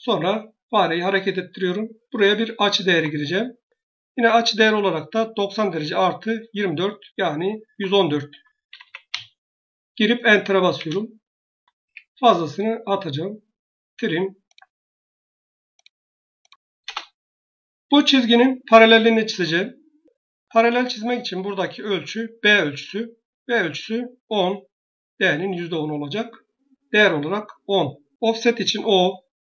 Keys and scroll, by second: 2.7 Tab, 7.7 Tab, 8.2 Tab, 8.3-9.4 typing, 10.6 Return, 11.7 Escape, 16.7 Return, 28.4 o.